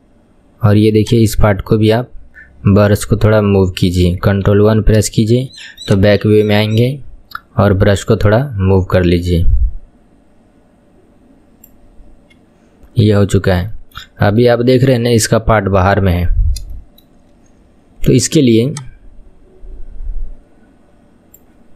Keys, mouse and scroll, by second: 0.1-0.9 scroll up 5, 1.1-4.0 drag, 4.6 ctrl+KP_1, 5.2 shift+middle click, 5.9-9.0 drag, 13.1 KP_1, 13.8 shift+middle click, 14.2-14.6 scroll down 3, 14.6-16.4 shift+middle drag, 16.4-16.8 scroll up 3, 16.8-18.8 shift+middle drag, 18.8-21.7 drag.